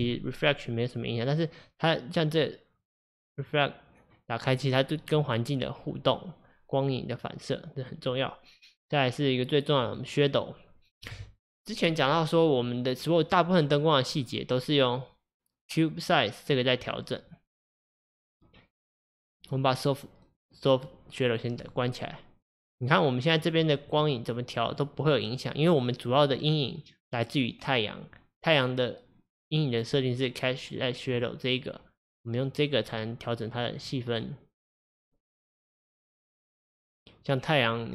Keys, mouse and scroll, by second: 1.2-3.0 drag, 3.3 click, 4.5 click, 5.1 click, 9.9-12.9 drag, 16.9-19.6 drag, 21.6-27.7 drag, 31.2-36.5 drag, 37.3 click.